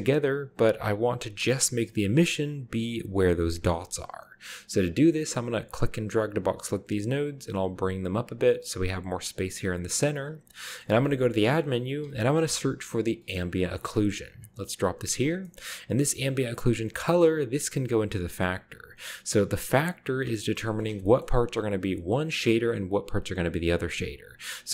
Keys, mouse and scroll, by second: 0.6-1.6 scroll up 1, 2.1-3.1 drag, 4.1-4.8 scroll down 1, 4.8-6.7 drag, 6.5 scroll up 1, 7.2 g, 8.4 click, 9.3 click, 9.8 g, 10.3-11.1 scroll up 1, 10.7 middle click, 10.9-12.4 typing, 11.3 click, 13.7 click, 14.8 click, 15.4-16.0 middle drag, 17.1-20.2 drag, 20.4-21.2 middle drag, 21.2-21.8 scroll up 1, 21.8-23.5 drag.